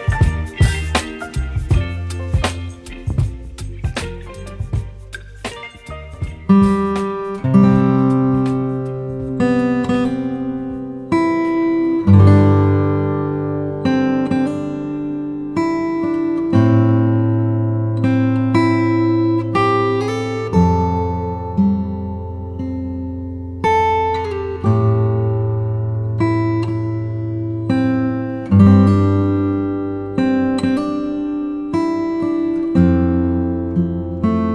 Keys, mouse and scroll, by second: 0.4 space, 0.7 click, 0.9 space, 2.0-2.4 typing, 3.4 click, 4.6 ], 5.3 click, 13.7 [, 13.8 click, 15.4 typing, 17.7 [, 20.1 click, 20.9-21.9 typing, 22.2 click, 26.8 typing, 28.3 click, 29.9 typing, 31.8 click.